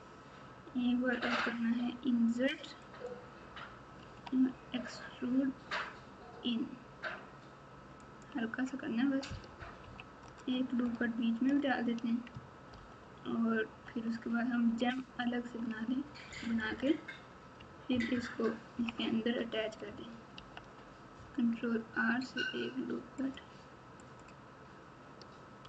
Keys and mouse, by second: 4.0 e, 9.8 KP_2, 10.8 KP_Add, 11.3 KP_Add, 11.4 KP_Add, 12.7 ctrl+KP_4, 13.2 ctrl+KP_4, 14.6 ctrl+KP_2, 15.1 ctrl+KP_2, 16.2 KP_Subtract, 16.5 KP_Subtract, 16.6 KP_Subtract, 17.9 ctrl+KP_2, 18.1 ctrl+KP_2, 20.3 ctrl+r.